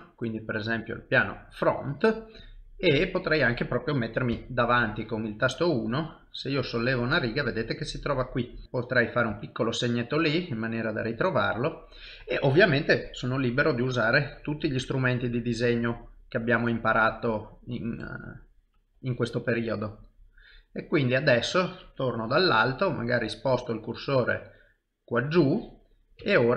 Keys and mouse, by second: 1.0 middle click, 2.0 shift+middle click, 2.5 ctrl+middle click, 3.2 middle click, 4.3 KP_1, 5.7 click, 6.7 middle click, 8.0 middle click, 8.6 click, 9.3 KP_1, 11.2 click, 12.9 click, 19.5 click, 19.5 middle click, 22.3 KP_7, 25.1 shift+right click, 26.2 KP_1.